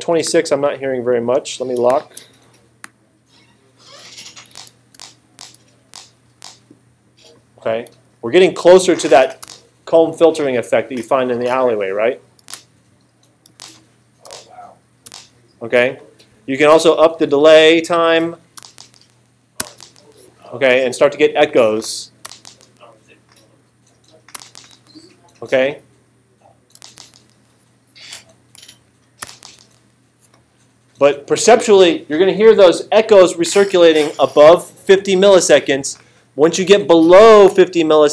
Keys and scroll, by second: 4.5 space, 9.4 space, 12.4 space, 13.6 space, 18.6 space, 22.2 space, 24.3 space, 26.8 space, 29.2 space.